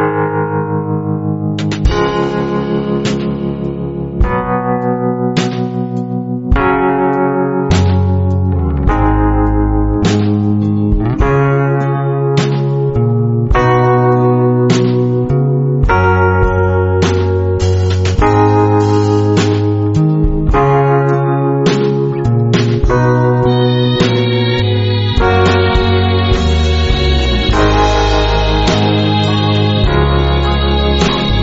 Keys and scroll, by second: 4.6 a, 8.2 space, 10.8 space, 11.3 alt+super+space, 11.5 alt+super+space, 13.2 alt+super+space, 14.2 alt+super+space, 14.6 alt+super+space, 14.7-17.0 alt+super+space, 17.0 w, 21.3 space, 21.8 alt+super+space, 21.9-22.3 alt+super+space, 26.5-28.1 typing, 27.1 alt+super+space, 27.1 alt+super+space, 30.6 space, 31.1 super+space.